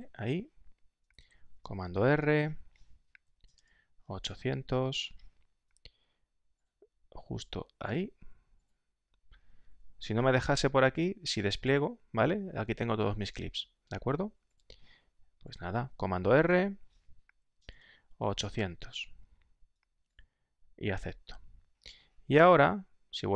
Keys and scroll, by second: 2.1 super+r, 3.0-5.3 typing, 16.3 super+r, 17.2-19.1 typing.